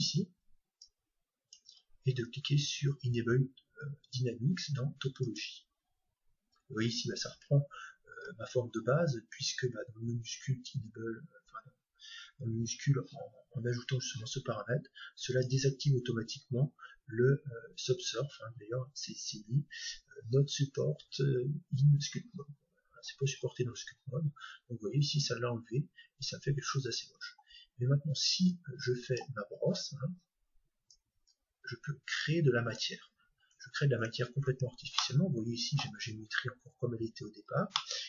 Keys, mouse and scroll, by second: 0.7-2.7 drag, 1.4-1.8 scroll down 1, 1.9-4.1 middle drag, 5.2-7.2 drag, 6.5 middle click, 8.1-9.9 scroll up 1, 9.9 scroll up 1, 15.2-17.2 drag, 23.4-24.5 scroll up 1, 24.5-25.5 scroll up 1, 25.7 scroll down 1, 26.6 middle click, 26.7-27.7 scroll up 2, 26.8 middle click, 27.7 scroll up 1, 28.5-30.4 drag, 30.9-32.7 drag, 33.7 Tab, 34.1 Tab, 34.6 Tab, 35.0-36.9 middle drag, 37.1-37.7 scroll down 1, 37.7-38.0 middle drag.